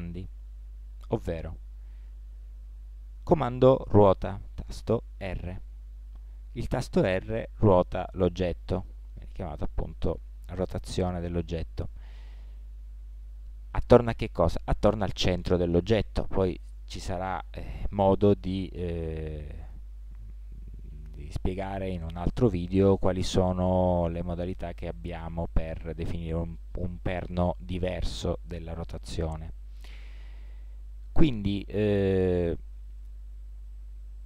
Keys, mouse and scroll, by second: 5.2 r.